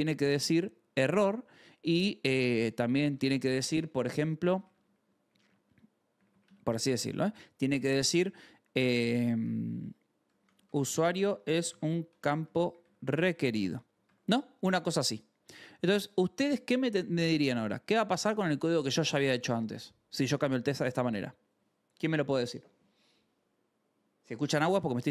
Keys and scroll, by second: 1.7-3.1 typing, 3.8 Left, 4.6 shift+=, 4.9 space, 5.2 Left, 5.6 space, 6.0 Right, 6.3 BackSpace, 6.7 Right, 9.9-14.0 typing, 15.4 h, 17.1 a, 17.4 space, 18.0 ctrl+s.